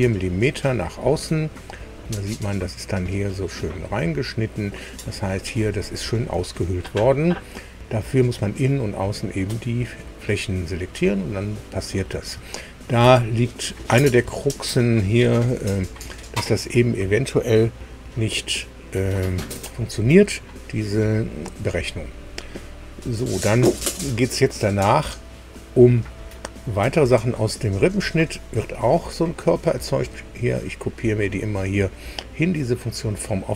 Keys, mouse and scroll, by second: 0.3-1.4 drag, 1.5 click, 1.5-3.4 middle drag, 3.4-4.7 drag, 5.2 middle click, 6.2 shift+click, 7.1 shift+click, 7.2-11.4 shift+middle drag, 11.5 click, 12.4 shift+middle click, 13.2-14.2 shift+middle drag, 14.4 shift+middle click, 15.4-16.5 middle drag.